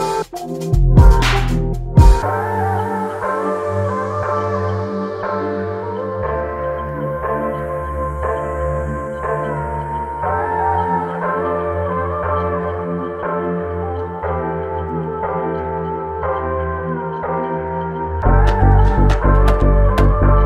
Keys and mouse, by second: 0.5 alt+click, 2.8 double click, 12.9 alt+click, 14.3 double click.